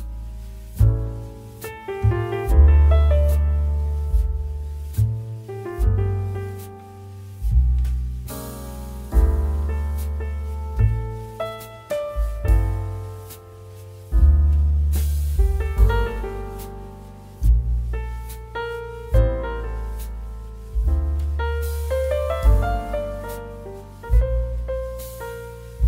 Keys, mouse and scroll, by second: 0.8-2.7 typing, 1.1 click, 4.0-23.7 drag, 12.2 typing, 22.2 typing, 23.7 right click, 25.6 click.